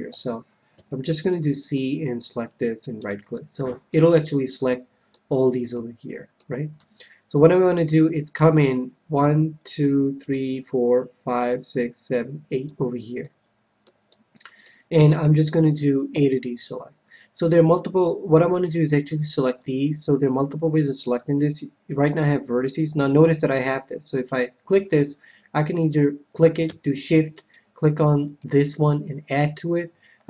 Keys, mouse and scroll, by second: 0.0 a, 0.7 c, 3.3-7.4 middle drag, 3.3-4.6 right drag, 6.6 KP_1, 8.5-10.2 drag, 13.1-15.6 middle drag, 16.1 a, 18.3-21.3 middle drag, 24.1-25.8 drag, 25.5-27.2 right drag.